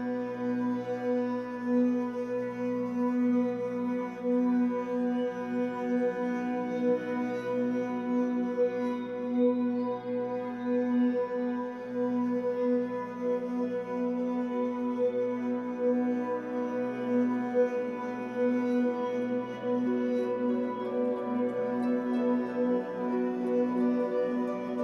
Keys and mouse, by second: 0.7-3.0 alt+drag, 3.4-6.8 alt+drag, 7.2-8.6 alt+drag, 9.1 3, 9.2 click, 9.6-11.5 ctrl+alt+drag, 11.9 Tab, 13.6 click, 16.7-17.8 drag, 17.9 alt+click, 18.8 ctrl+alt+click, 19.3 alt+click, 21.2 click, 22.1 shift+click.